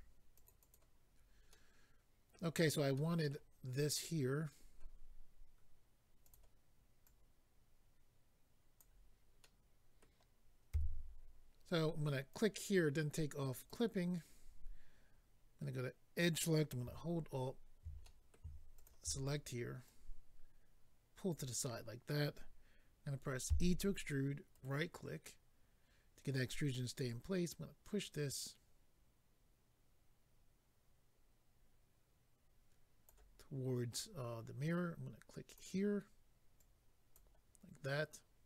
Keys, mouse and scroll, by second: 0.3 click, 0.5 click, 0.6 click, 0.7 double click, 1.5 middle click, 2.9 middle click, 6.2 click, 6.3 click, 7.0 click, 9.4 middle click, 10.7 a, 12.3 click, 12.4 click, 13.5 click, 13.7 click, 16.2 click, 18.0 middle click, 18.7 alt+click, 19.9 click, 24.5 right click, 24.5 e, 24.6 right click, 27.1 click, 35.4 click, 35.5 click, 36.6 click.